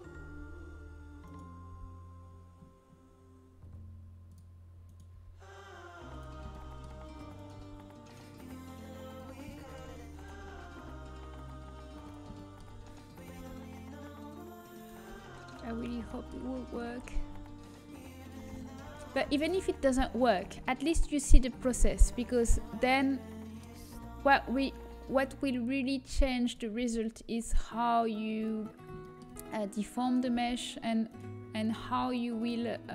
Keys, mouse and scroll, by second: 1.7 g, 2.8 right click, 4.7-6.5 right drag, 5.6 g, 6.5-8.1 middle drag, 8.0 g, 8.3 click, 9.5-11.2 middle drag, 11.2 right click, 11.2 g, 12.4-14.2 middle drag, 14.2 right click, 14.2 g, 14.8 g, 16.8 g, 21.4 g, 24.7 g, 26.7 g, 28.3-30.9 middle drag, 30.9 g, 31.7 g.